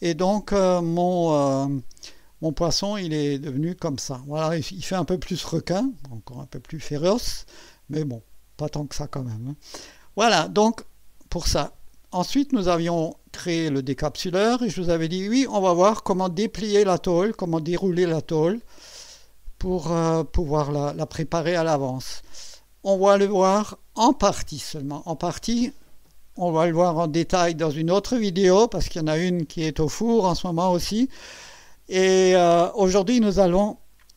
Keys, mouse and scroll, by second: 1.5 click, 1.8 space, 2.4-5.8 drag, 5.8-10.1 drag, 11.9-12.9 drag, 14.6-15.4 drag, 19.5-25.6 drag.